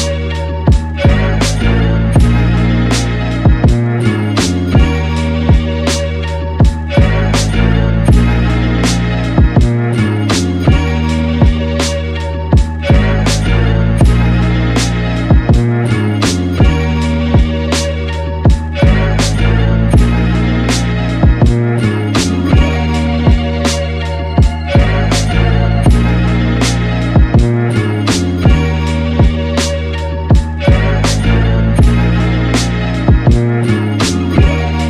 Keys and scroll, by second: 0.0-2.9 typing, 8.0-11.1 typing, 30.7 super+z.